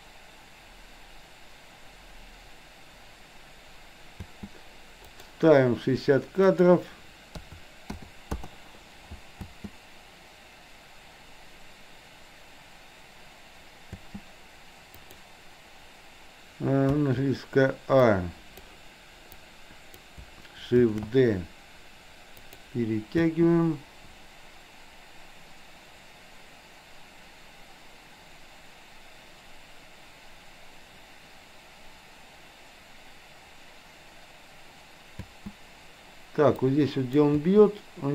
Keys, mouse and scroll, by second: 4.2 space, 5.2 drag, 6.6-8.5 drag, 9.5 space, 13.9 space, 15.1 click, 17.0 a, 18.0-18.7 drag, 19.4 click, 20.9 shift+d, 23.2 space, 35.2 space, 36.7 click, 37.4 space.